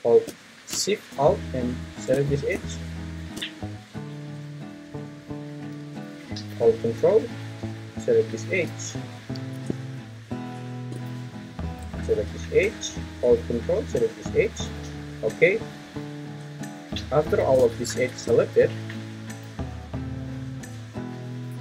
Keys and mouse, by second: 1.7 shift+click, 9.4 ctrl+z.